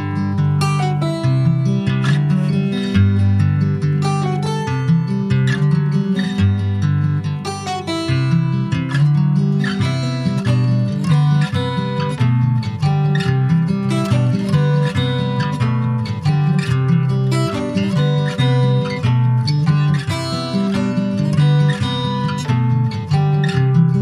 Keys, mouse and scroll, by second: 0.2 middle click, 0.6 scroll up 2, 0.8 middle click, 1.3 i, 2.8 middle click, 3.7 scroll up 1, 3.9-5.5 middle drag, 5.5 s, 7.1-8.7 middle drag, 8.7 e, 10.6 middle click, 11.3 ctrl+b, 14.1 Tab, 14.2 click, 14.4 scroll down 4, 14.7 middle click, 15.1 ctrl+s, 15.2 click, 15.6 ctrl+a, 16.5 click, 16.8 ctrl+s, 16.8 click, 17.1 alt+middle click, 18.3 alt+middle click, 19.1 Tab, 20.1 Tab, 20.2 click, 20.8 shift+middle click, 21.3-23.7 right drag, 23.7 ctrl+s.